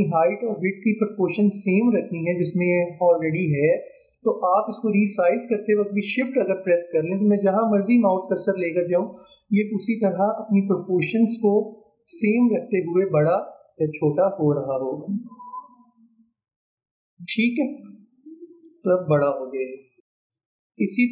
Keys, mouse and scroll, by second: 5.0-14.6 drag, 20.1-20.5 alt+scroll down 1.